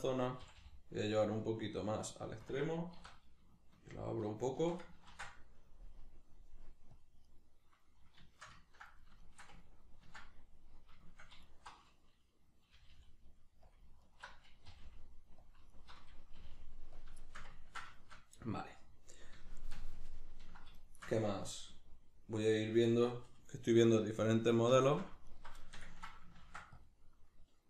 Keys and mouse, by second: 0.4 g, 2.5 click, 3.0 alt+s, 4.6 shift+click, 5.1 ctrl+r, 7.4 right click, 8.3-11.4 shift+middle drag, 11.4 alt+right click, 12.7 g, 13.8 click, 14.0 alt+right click, 14.7 g, 15.5 click, 15.7 alt+right click, 16.4 g, 17.0 click, 17.2-25.3 ctrl+shift+middle drag, 25.3 alt+right click, 25.6-27.6 ctrl+shift+middle drag, 26.4 ctrl+r.